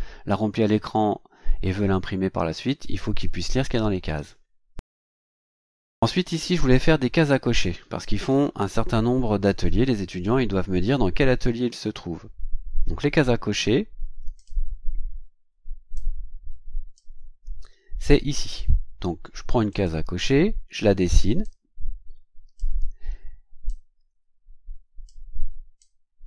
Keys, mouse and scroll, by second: 14.3 click, 15.9-17.1 drag, 19.7 click, 21.4-22.7 drag, 23.6-25.2 drag, 25.8 click.